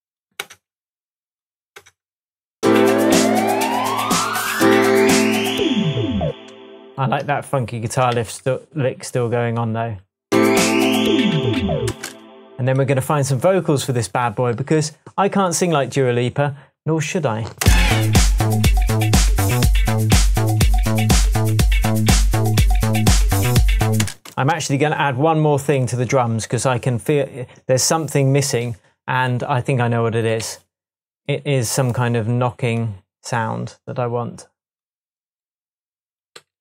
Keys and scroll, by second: 0.3 BackSpace, 1.7 BackSpace, 6.2 space, 8.1 super+d, 11.8 space, 17.6 space, 24.0 space, 30.4 Left, 36.3 Left.